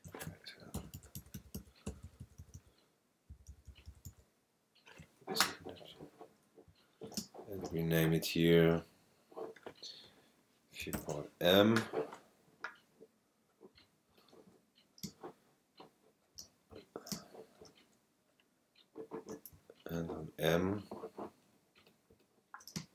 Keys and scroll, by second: 0.7 alt+shift+Down, 7.2 super+space, 10.9 shift+m, 15.0 super+space, 17.3 super+space, 22.7 super+space.